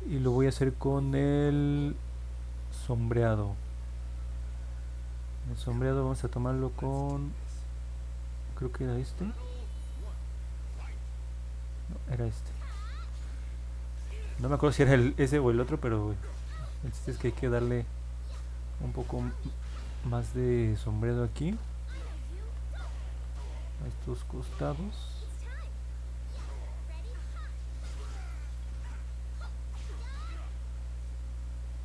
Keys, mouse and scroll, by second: 0.6-2.0 drag, 26.4-31.8 drag.